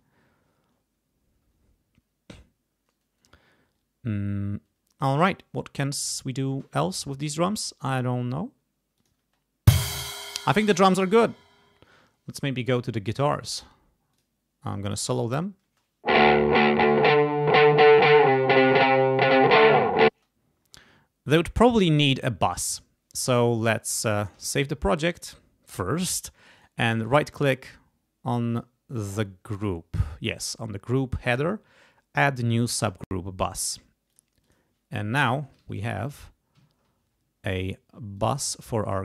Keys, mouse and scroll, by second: 7.6 click, 9.0 click, 9.2 space, 10.1 space, 10.2 click, 10.8 scroll down 2, 13.1 click, 14.1 click, 15.6 space, 19.1-19.6 ctrl+scroll up 2, 19.6 ctrl+scroll down 2, 20.1 ctrl+space, 24.4 ctrl+s, 26.6 right click, 28.5 click, 29.6 right click, 32.7 click, 34.0 click, 34.4 click, 35.3 ctrl+Up, 36.5 ctrl+Down, 38.1 click, 38.8 click.